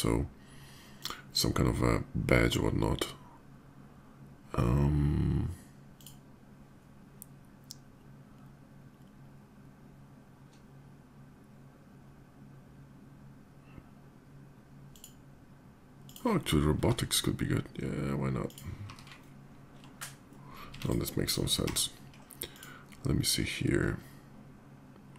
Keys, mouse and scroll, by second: 0.8 click, 5.7 click, 14.7 click, 15.7 click, 18.2 click, 18.2 s, 18.6 f, 20.2 middle click, 20.6 click, 20.6 x, 21.0 click, 21.3 d, 22.3 click, 24.9 click.